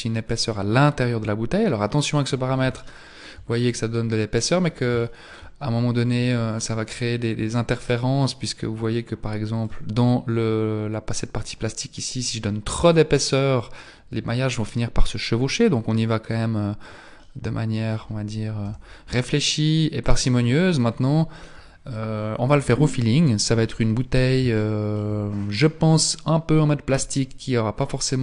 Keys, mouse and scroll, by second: 2.8 shift+middle click, 3.6-4.4 scroll up 5, 5.0 shift+middle click, 6.2 click, 12.4 click, 17.2 middle click, 18.6 z, 19.2-20.4 scroll down 1, 20.4 scroll down 2, 24.6 shift+middle click, 25.0-25.6 shift+scroll down 1.